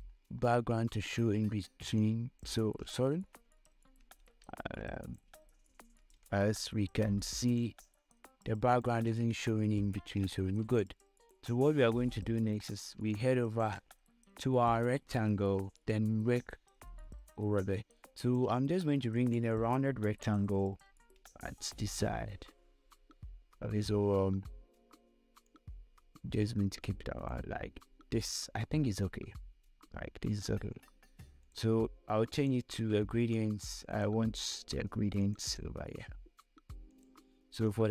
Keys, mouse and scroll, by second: 0.1 scroll up 1, 1.9 scroll down 1, 2.4-4.0 drag, 4.0 ctrl+z, 5.4 click, 6.0 ctrl+z, 6.6 ctrl+z, 7.4 space, 7.6 click, 8.0 space, 9.8 scroll up 1, 10.2 scroll down 1, 11.0 space, 11.1 click, 11.5 space, 12.5 scroll up 1, 13.4 space, 13.5 click, 14.1 space, 14.2 scroll down 1, 17.8 space, 18.2 click, 18.3 space, 19.6 right click, 20.5 click, 21.2 scroll up 1, 25.7 scroll up 1, 25.8-29.9 drag, 31.8-37.9 drag.